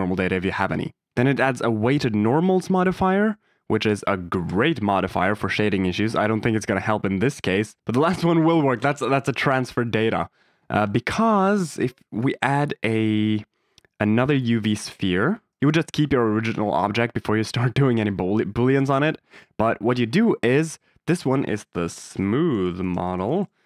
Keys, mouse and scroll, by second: 1.7 click, 2.4-4.4 drag, 5.5 middle drag, 11.2 shift+a, 15.6 g, 15.6 z, 15.6 x, 15.8 y, 19.8 click, 21.1 F2, 22.3 o.